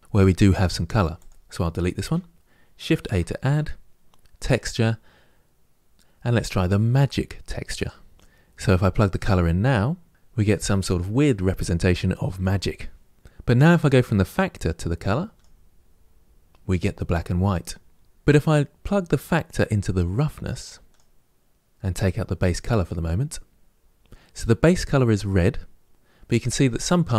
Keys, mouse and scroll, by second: 1.9 Delete, 10.0-15.2 drag, 20.7 click, 21.7 click.